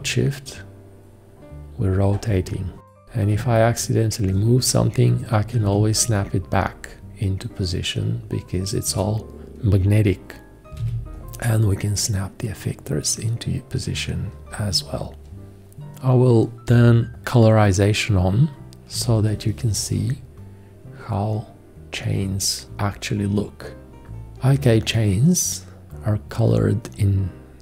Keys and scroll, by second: 5.1-6.1 typing, 10.8 `, 19.1 shift+g, 23.9 g.